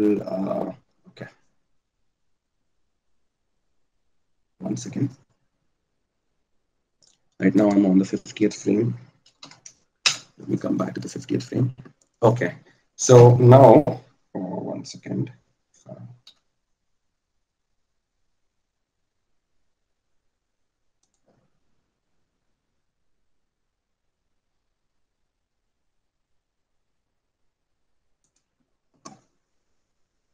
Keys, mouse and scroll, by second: 17.5 g.